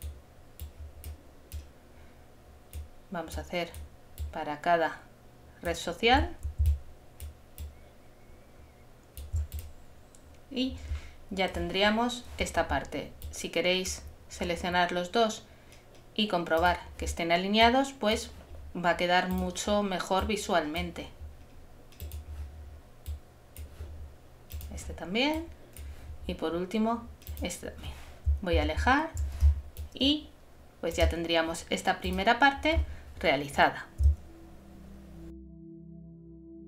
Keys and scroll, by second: 28.6 super+-, 29.4 super+space.